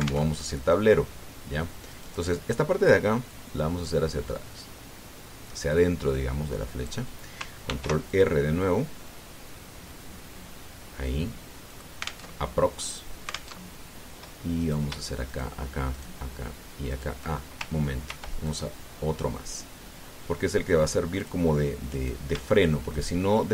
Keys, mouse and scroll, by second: 1.0 alt+Tab, 2.7 right click, 4.0-7.8 drag, 8.5 ctrl+r, 8.8 ctrl+click, 12.5 click, 13.0 alt+Tab, 14.3 alt+Tab, 15.4 right click, 16.1 shift+right click, 16.7 shift+right click, 17.7 shift+right click, 18.8 ctrl+r, 19.3 ctrl+click, 22.0 click, 22.7 right click.